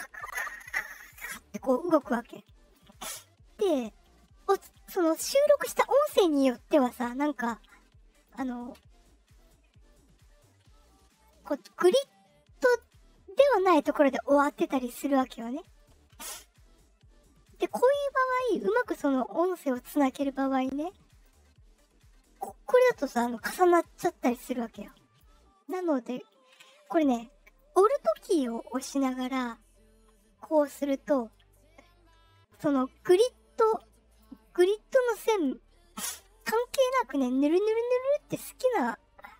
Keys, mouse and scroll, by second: 8.3-12.7 alt+drag, 17.5-19.7 drag, 21.1-25.1 drag, 29.4-32.2 alt+drag, 32.2-34.1 alt+right drag, 35.4-39.3 alt+drag.